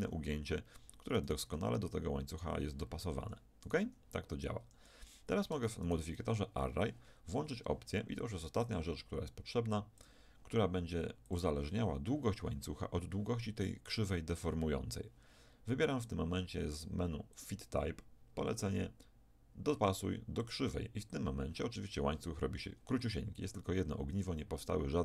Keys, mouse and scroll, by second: 0.0 g, 1.5 g, 2.8 click, 3.9 g, 4.3-5.5 right drag, 5.5 Tab, 5.9 right click, 6.5-8.9 drag, 9.9-13.9 drag, 17.3-19.9 drag.